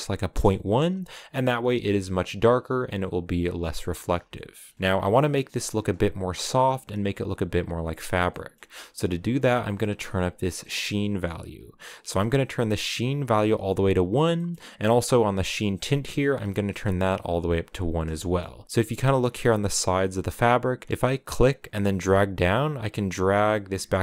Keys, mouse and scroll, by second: 1.4 shift+middle click, 2.2 scroll down 2, 3.3-3.8 scroll up 1, 4.1 shift+middle click, 4.4 scroll up 2, 12.1-14.3 drag, 14.3-15.7 middle drag, 15.7-17.5 drag, 17.5-17.9 scroll down 1, 17.9-22.5 shift+middle drag, 22.5-24.0 drag.